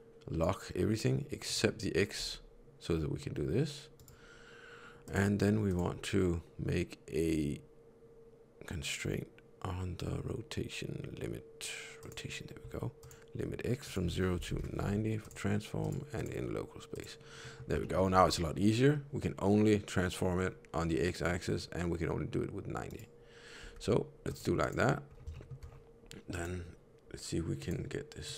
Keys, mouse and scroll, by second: 1.3 click, 2.1 r, 4.9 click, 5.6 click, 12.9 click, 13.8 click, 15.1 click, 15.7 click, 16.1 click, 17.3 middle click, 17.7 shift+middle click, 18.0 r, 23.5 r, 24.5 click, 25.0 scroll down 1, 25.2 shift+middle click, 26.2 click, 28.2 click.